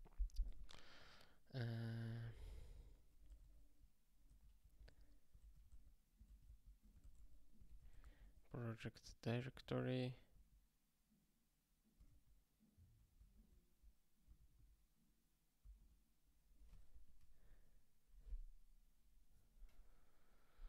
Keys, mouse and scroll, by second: 1.5 click, 2.1 ctrl+b, 4.2 ctrl+g, 4.9 ctrl+f, 5.4 ctrl+g, 6.4 ctrl+p, 7.6 ctrl+g, 16.9 ^.